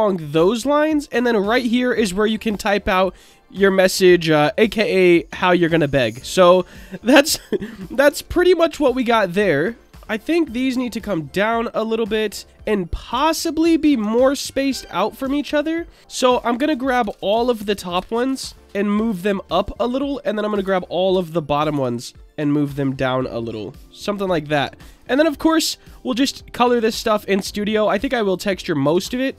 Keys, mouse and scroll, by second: 0.1-1.1 middle drag, 3.0 middle click, 4.3 click, 5.4-5.7 shift+middle drag, 6.6-7.8 drag, 8.0 Tab, 8.5 middle click, 8.9 Tab, 9.8 middle click, 10.8-11.8 drag, 13.1 Tab, 14.0 Tab, 15.2 Tab, 17.0 l, 17.9 l, 18.9 click, 18.9 l, 20.4 click, 20.6 l, 21.7 l, 22.9-24.1 drag, 22.9 l, 24.6 Tab, 26.6-27.8 middle drag.